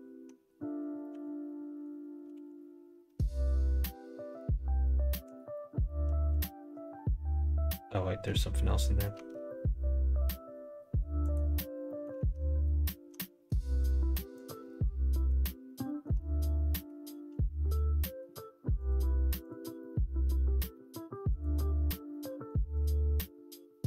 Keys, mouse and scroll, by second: 1.0 l, 2.6 g, 6.8-8.2 middle drag, 9.4 Tab, 11.2 click, 11.8 middle click, 12.5 middle click, 13.1 middle click, 13.4 Tab, 14.3 click, 15.0 middle click, 15.6 middle click, 16.3 middle click, 17.3 shift+middle click, 17.9 middle click, 18.7 click, 20.6 middle click, 21.2 click, 22.0 middle click.